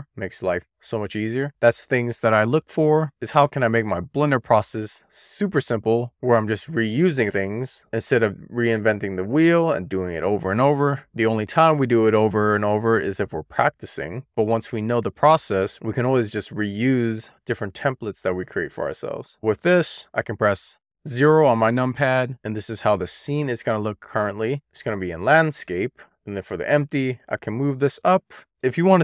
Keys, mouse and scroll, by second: 0.5-1.2 scroll down 2, 1.2 scroll down 1, 1.3 shift+middle click, 2.0-2.7 scroll up 2, 2.7-5.8 middle drag, 7.3-8.1 scroll down 1, 8.1-10.3 scroll up 1, 10.3-11.7 scroll down 3, 11.8 click, 18.4 drag, 19.8 KP_0, 22.3 click, 27.7-28.5 scroll down 1, 28.5-29.0 scroll up 1.